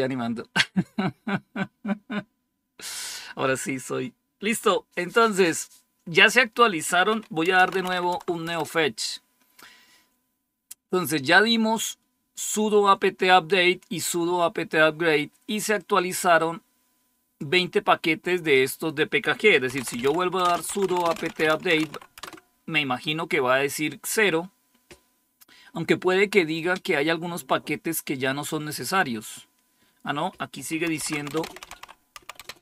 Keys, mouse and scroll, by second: 7.1-8.4 typing, 15.7-18.1 drag, 19.4-22.2 typing, 23.8 typing, 30.5-32.6 typing.